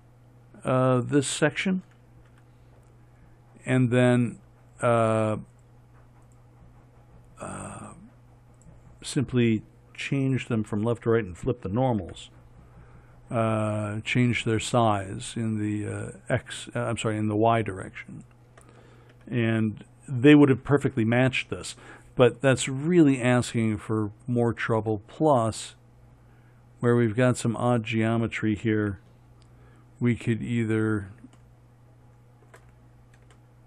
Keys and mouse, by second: 2.7 f, 12.5 f, 19.6 f, 29.2 f.